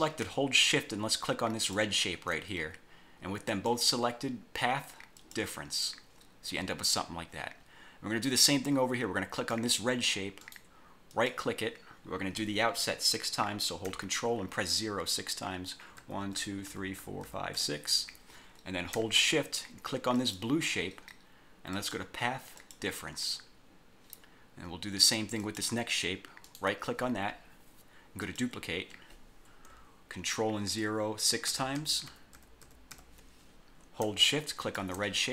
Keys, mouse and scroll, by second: 1.7 shift+click, 3.6 click, 5.3 click, 9.5 click, 10.5 right click, 11.2 click, 16.1 ctrl+0, 20.3 shift+click, 21.9 click, 22.7 click, 25.5 click, 26.5 right click, 28.3 click, 31.6 ctrl+0, 34.8 shift+click.